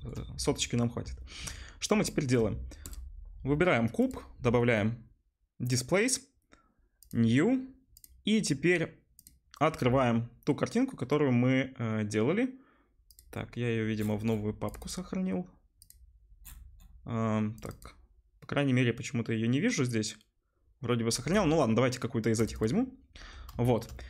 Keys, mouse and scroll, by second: 4.1-8.0 middle drag, 9.2-23.2 middle drag, 23.5-24.0 shift+drag.